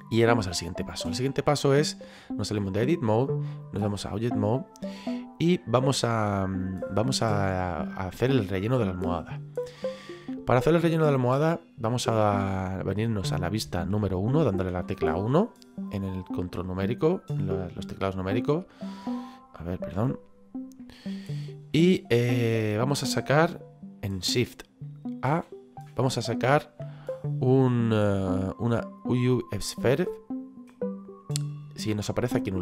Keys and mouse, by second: 3.0 click, 4.8 middle click, 14.7 KP_1, 18.5 middle click, 20.0 KP_1, 21.0 shift+middle click, 30.7 click, 32.2 middle click.